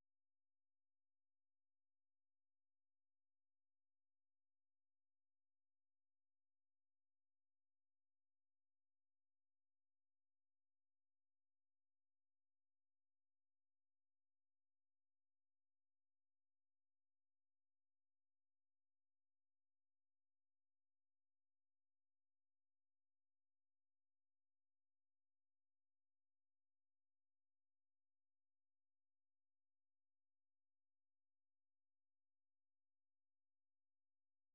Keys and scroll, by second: 1.8-2.6 typing, 6.6-10.7 typing, 12.9-13.6 typing, 24.3 ctrl+t, 24.5-25.7 typing, 27.7-29.3 typing, 29.4 Return.